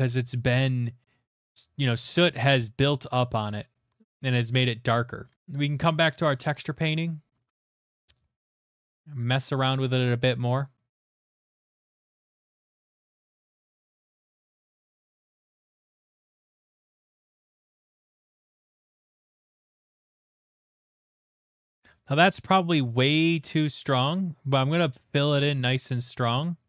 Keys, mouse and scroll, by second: 1.3-3.4 scroll, 5.0 middle click, 5.4 click, 7.4 click, 7.8 middle click, 8.0 middle click, 8.0 middle click, 8.0 middle click, 8.3 middle click, 8.5 shift+middle click, 8.8 click, 9.0 click, 10.9 click, 11.0 click, 11.2 click, 11.3 click, 11.5 click, 11.6 click, 11.8 click, 12.1 click, 12.8 click, 13.1 click, 13.2 click, 13.3-13.8 click, 13.5 click, 13.6 click, 13.7 click, 14.0 click, 14.2 click, 14.3 click, 14.4 click, 14.6 middle click, 14.7 middle click, 14.7 middle click, 14.8 middle click, 14.9 shift+middle click, 15.0 shift+middle click, 15.5 click, 15.7 click, 15.8 click, 15.9 click, 16.2-16.6 click, 16.4 click, 16.5 click, 16.8 middle click, 16.9 click, 17.1 middle click, 17.3 click, 17.5 click, 17.6 middle click, 17.7 click, 17.8 click, 18.0 click, 18.0 click, 18.6 middle click, 18.8 middle click, 18.8 shift+middle click, 18.9 click, 19.0 click, 19.1 click, 19.2 click, 19.3 click, 19.4 click, 19.5 click, 19.5-19.9 click, 20.1 click, 20.2 click, 20.3 click, 20.4 click, 20.5 click, 20.6 click, 20.8 middle click, 20.9 click, 21.0 click, 21.2 click, 21.2 click, 21.3 middle click, 21.5 middle click, 22.1 middle click, 24.2 middle click, 24.9 shift+middle click, 26.2 middle click, 26.6 click.